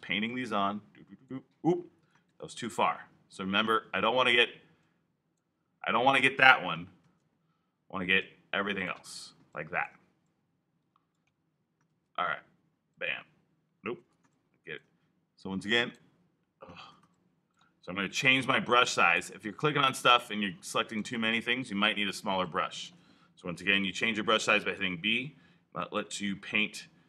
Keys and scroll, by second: 2.2 super+z, 6.9 super+z, 11.8 super+z, 13.9 super+z, 16.7 super+z, 18.0 alt+b, 18.5 b, 23.4 alt+b, 23.9 b.